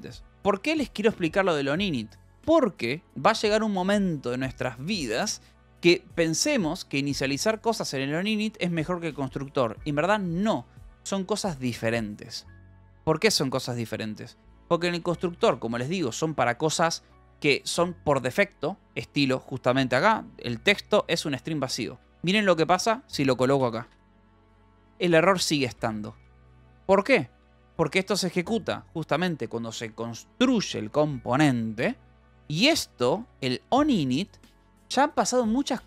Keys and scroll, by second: 0.5 j, 1.3 j, 3.3 o, 6.1 l, 14.9 k, 15.9 shift+v, 19.1 Escape, 21.1 l, 22.1 d, 22.5 j, 23.7-27.5 typing, 27.4 Escape, 33.5 j.